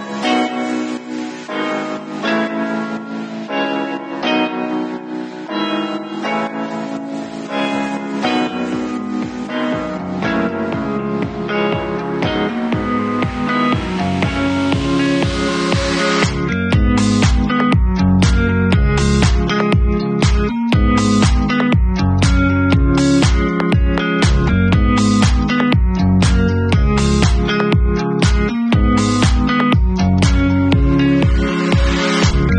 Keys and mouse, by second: 7.2-12.2 drag, 12.2-15.6 middle drag, 15.6 click, 15.7-20.7 middle drag, 20.7 click, 20.9 right click, 21.0-23.2 middle drag, 21.9 ctrl+v, 23.2-24.7 alt+drag, 24.7 middle click, 24.9 click, 25.0-25.4 middle drag, 25.4-30.9 drag, 27.0 r, 28.1 w, 30.9-32.2 shift+middle drag, 31.2 shift+z, 31.9 r, 32.2-32.5 drag.